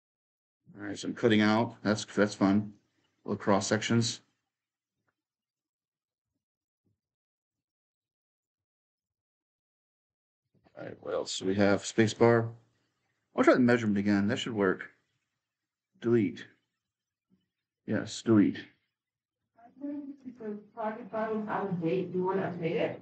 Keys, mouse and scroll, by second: 4.3-7.3 right drag, 5.7 s, 6.1 d, 7.3-11.9 typing, 8.2-9.3 right drag, 9.3 click, 9.6-11.9 right drag, 13.5 middle click, 14.8 middle click, 16.6 middle click, 17.9 middle click, 18.1 middle click.